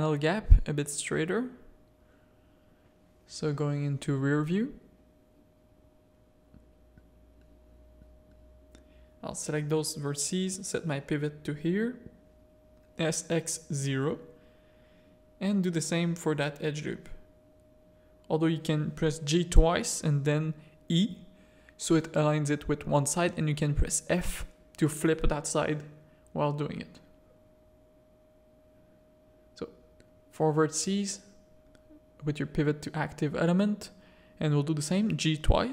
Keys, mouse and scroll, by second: 0.5 1, 1.5 KP_1, 2.2 ctrl+KP_1, 3.7 shift+middle click, 5.3 ctrl+KP_1, 6.8 z, 7.8 a, 7.8 click, 8.5 ctrl+click, 11.1 click, 12.4 s, 15.2 alt+click, 16.4 g, 21.8 Tab, 22.2 z, 22.6 alt+a, 23.1 click, 23.4 Tab, 24.8 Tab, 25.3 Tab, 25.9 z, 29.5 click, 30.2 ctrl+click, 30.8 s, 33.8 alt+click, 34.6 g.